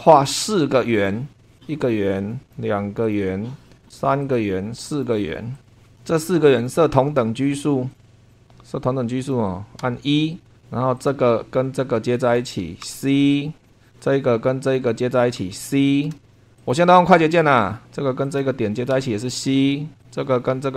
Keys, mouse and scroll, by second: 1.0 click, 1.5 click, 1.8 click, 2.4 click, 3.0 click, 4.2 click, 4.9 click, 5.5 click, 6.0 Escape, 6.5 click, 7.9 click, 8.3 click, 9.2 click, 9.8 e, 10.4-11.0 scroll up 2, 11.0 click, 12.2 click, 12.8 c, 13.6 click, 13.8 click, 14.6 click, 15.4 c, 15.7 scroll down 1, 16.2 shift+middle click, 16.3 shift+scroll up 2, 16.6 click, 18.2 click, 18.9 c, 20.0 click.